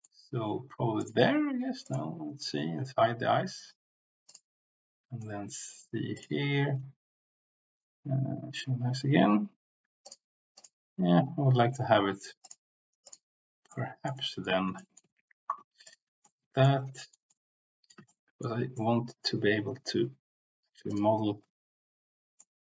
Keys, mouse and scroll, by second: 1.8 alt+click, 5.2 middle click, 13.9 middle click, 14.2 middle click, 14.7 shift+middle click, 16.2 middle click, 16.9 shift+middle click, 17.2 middle click, 18.1 shift+middle click, 18.7 middle click, 22.3 middle click.